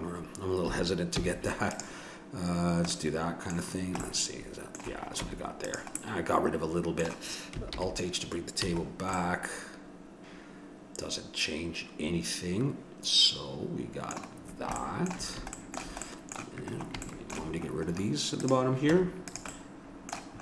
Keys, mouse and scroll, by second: 1.2 x, 2.6-3.9 middle drag, 5.2 Tab, 7.7 alt+h, 8.6 a, 9.2 middle click, 11.0 middle click, 11.7 middle click, 14.6-16.6 middle drag, 18.4-20.4 right drag, 18.9 Tab.